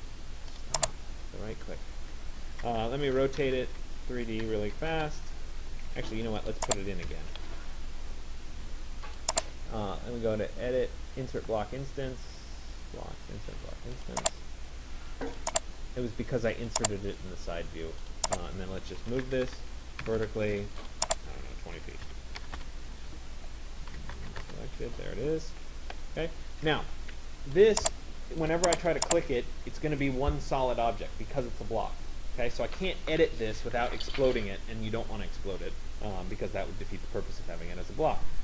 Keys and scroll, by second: 4.1 3, 4.9 d, 5.1 Return, 5.9 Escape, 19.2 Return, 27.2 Escape.